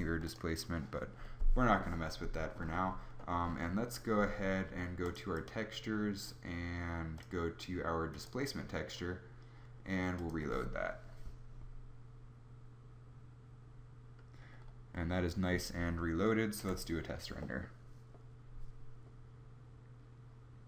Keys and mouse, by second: 14.5-16.3 middle drag, 16.3 F12.